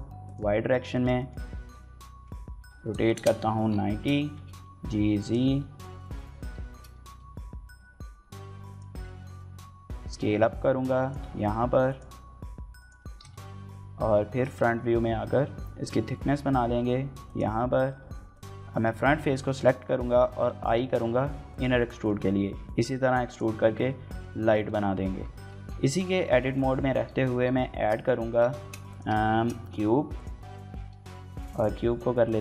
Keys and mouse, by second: 0.0 click, 0.7 shift+middle click, 1.0 middle click, 1.5 KP_1, 2.3 r, 2.6 KP_9, 2.7 KP_0, 3.0 KP_Enter, 3.8 shift+click, 4.0 g, 4.2 z, 5.0 click, 5.4 KP_1, 5.6 KP_3, 6.5 shift+click, 6.7 g, 6.9 x, 7.9 y, 8.5 click, 9.0 shift+middle click, 9.4 s, 10.8 click, 10.9 g, 11.7 click, 11.8 s, 12.6 click, 13.0 KP_1, 14.1 shift+middle click, 14.4 s, 14.5 x, 17.1 click, 17.3 middle click, 18.1 click, 18.5 shift+middle click, 18.7 middle click, 19.3 shift+middle click, 20.1 i, 21.3 click, 21.7 middle click, 23.1 click, 23.4 Tab, 24.2 shift+middle click, 24.4-25.0 middle drag, 25.0 Tab, 25.7 shift+middle click, 25.9 middle click, 26.3 KP_1, 26.9 KP_3, 28.0 a, 28.4 shift+s, 29.1 shift+a, 30.7 s, 31.3 click, 31.6 s, 32.1 click.